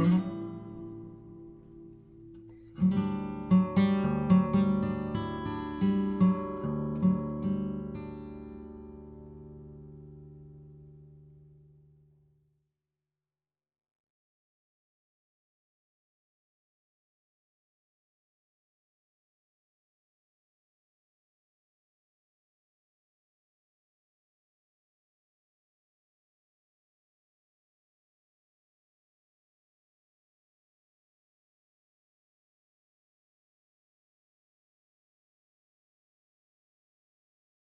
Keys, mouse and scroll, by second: 1.2-1.9 scroll down 2, 1.9-6.4 drag, 6.4-7.8 middle drag, 7.8 click, 8.6 KP_1, 9.4-10.4 drag, 10.4 ctrl+z, 10.7 middle click, 11.5 click, 11.9 middle click, 12.4-15.6 drag, 15.6 middle click, 16.3-18.3 drag, 18.3-19.6 middle drag, 19.6 click, 20.4 middle click, 20.5-20.8 scroll down 1, 20.8 click, 21.7 n, 22.3 click, 22.6 middle click, 22.9 scroll up 1, 23.4-24.9 drag, 24.9 middle click, 25.4-28.1 drag, 28.1 middle click, 29.0 click, 29.3 middle click, 29.8 click, 30.6 middle click, 31.1-32.4 drag, 32.4 middle click, 33.1 click, 33.5 middle click, 34.0-36.0 drag, 36.0-37.1 middle drag, 37.1-37.7 drag.